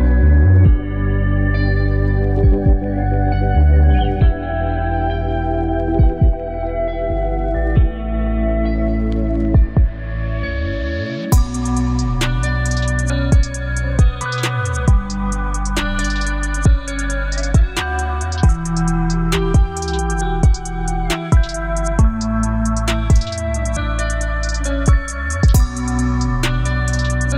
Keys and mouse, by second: 2.9 ctrl+t, 4.1 click, 5.3 drag, 6.1-9.0 drag, 9.3-11.5 drag, 11.7 click, 12.4 click, 13.3-19.3 drag, 19.8 click, 20.5-22.5 drag, 22.9 click, 23.6 click, 23.9 space.